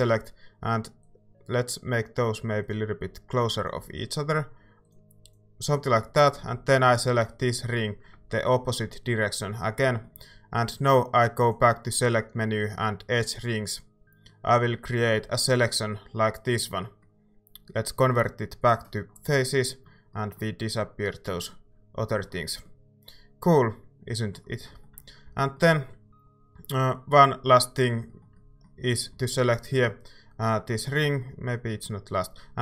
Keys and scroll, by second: 25.2 a.